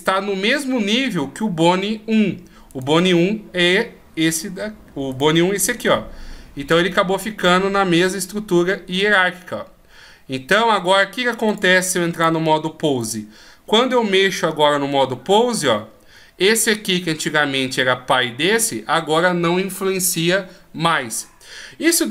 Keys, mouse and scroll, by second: 2.7 right click, 5.2 right click, 9.0 click, 11.5 click, 13.0 right click, 14.3 r.